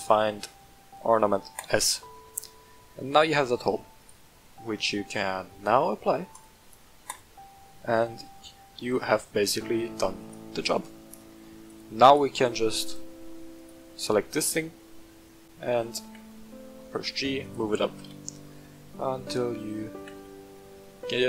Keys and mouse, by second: 2.2-3.6 middle drag, 4.0 right click, 6.3-7.2 drag, 7.6-9.5 middle drag, 10.2 right click, 11.6 click, 16.0 g, 16.2 z, 17.4 click, 18.0 KP_1, 18.9 shift+middle drag, 19.9 g, 20.1 z.